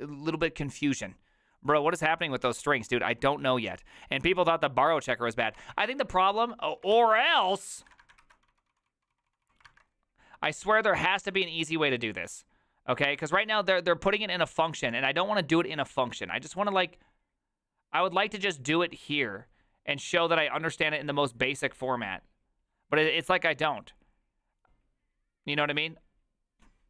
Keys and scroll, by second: 5.5 alt+r, 5.7 Right, 6.0 Right, 6.4 Right, 6.4 Escape, 6.9 alt+{, 7.4 ctrl+c, 7.8 ctrl+a, 8.0-10.2 typing, 8.2 ctrl+c.